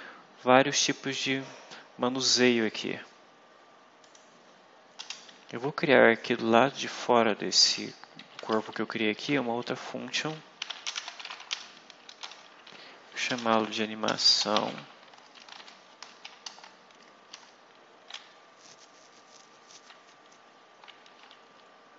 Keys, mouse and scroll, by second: 2.7 scroll up 2, 3.9 click, 4.9 Return, 7.3 Down, 8.1 Up, 8.4 shift+Down, 9.2 shift+Up, 10.3-16.0 typing, 16.3 shift+Return, 17.2 Return.